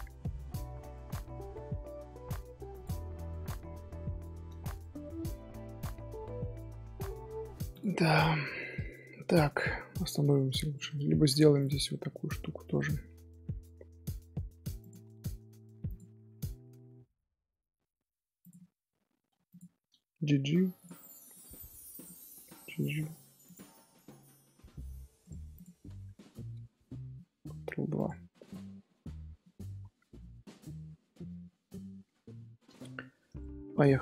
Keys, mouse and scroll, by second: 0.1 scroll down 1, 0.2-0.7 middle drag, 0.7 scroll down 1, 0.7 scroll up 1, 0.9 scroll down 1, 1.0 scroll up 1, 1.0 scroll down 1, 1.1-2.3 middle drag, 2.3 scroll down 1, 2.3-2.7 scroll up 1, 2.7 click, 3.0 scroll down 3, 3.4-6.3 middle drag, 6.3 scroll up 2, 6.4 scroll down 1, 6.7-7.0 scroll up 1, 7.0-7.7 middle drag, 7.7 click, 8.0 scroll down 1, 8.5-9.7 shift+middle drag, 9.7 Tab, 10.1 middle click, 10.8-11.1 scroll up 1, 11.1 3, 11.5 alt+click, 11.9 shift+middle click, 12.1-12.7 scroll up 2, 12.7 middle click, 18.6-19.0 scroll up 2, 19.0 2, 19.5 alt+click, 20.1 g, 21.0 middle click, 21.9 alt+click, 22.4 g, 23.7 scroll down 1, 23.8 scroll up 1, 23.9-25.2 middle drag, 25.2-26.7 right drag, 26.7 scroll up 1, 27.5 ctrl+2, 27.9 click, 28.3-29.1 middle drag, 29.1 scroll down 2, 29.4-29.8 middle drag, 29.8 scroll down 1, 30.1-33.8 middle drag, 33.8 scroll up 3.